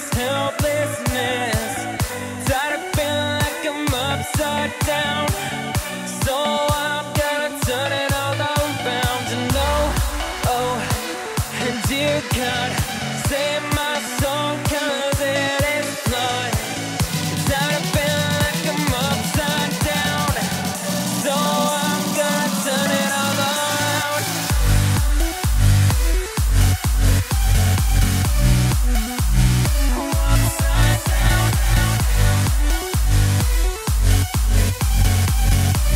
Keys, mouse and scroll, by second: 0.8 i, 3.4-11.1 drag, 15.3 click, 19.7 x, 20.5-24.1 drag, 27.8 scroll down 1, 28.1-29.8 middle drag, 29.8-30.3 scroll up 4, 34.5 scroll up 1, 34.8-35.9 middle drag.